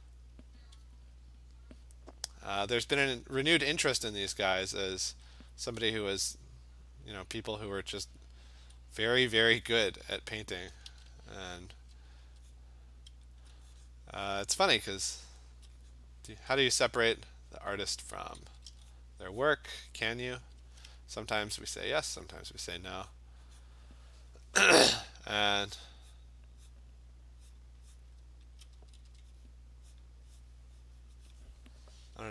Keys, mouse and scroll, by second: 0.0 click, 0.3 click, 1.5 alt+click, 2.8-3.2 alt+click, 3.2 click, 3.5 click, 3.7 click, 4.6 click, 5.4 alt+click, 7.9 click, 9.5 alt+click, 10.0 click, 10.7 click, 10.9 alt+click, 10.9 ], 11.1 ], 11.4-11.9 ], 12.2 ], 12.6 click, 13.4 alt+click, 14.0 click, 14.9 click, 15.5 alt+click, 16.0 click, 16.4 click, 16.9 alt+click, 17.9 alt+click, 18.2 [, 18.5 [, 18.7 [, 19.0 click, 19.5 click, 19.9 click, 19.9 alt+click, 20.4 ], 21.7 alt+click, 22.2 click, 22.7 click, 23.2 click, 23.7 click, 23.8 alt+click, 24.2 click, 24.9 alt+click, 25.6 click, 26.2 click, 26.8 click, 26.8 click, 27.6 click, 28.0 click, 28.6 alt+click, 28.8 [, 29.1 [, 30.0 click, 31.4 click, 32.0-32.3 typing.